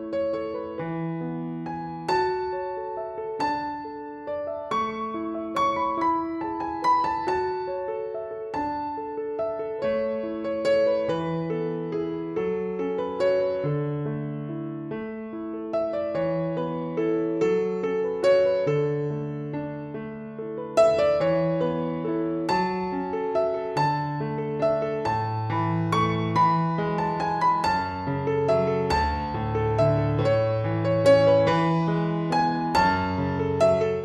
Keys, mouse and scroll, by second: 3.4 right click, 4.7 click, 12.5 click.